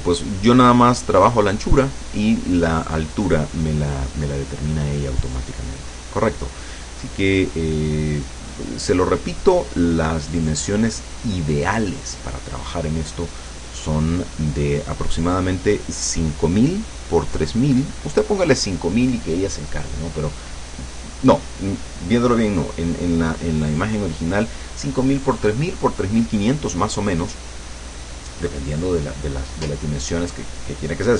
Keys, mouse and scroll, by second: 7.0 click, 8.0-9.2 drag, 10.6 click.